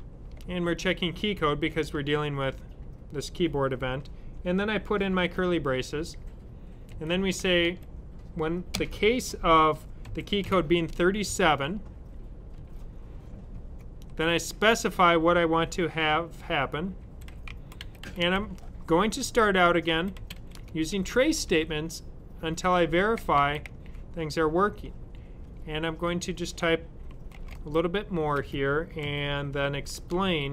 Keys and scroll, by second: 1.5 typing, 4.3 typing, 7.0-7.8 typing, 10.1-11.2 typing, 16.7-21.4 typing, 22.4-24.6 typing, 27.2-30.2 typing.